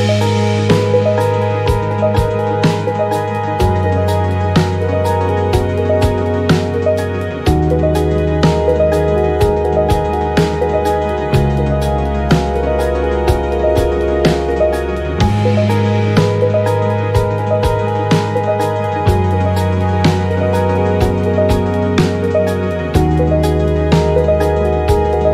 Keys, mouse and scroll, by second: 1.4 click, 4.0 click, 4.7-5.1 ctrl+scroll up 2, 5.7 ctrl+d, 6.7-8.4 ctrl+shift+drag, 8.8-11.8 ctrl+drag, 12.3 click, 13.7 click, 15.6 click, 16.3 click, 17.4-18.8 drag, 19.6 click, 21.7 click, 23.0 Delete, 24.8 click.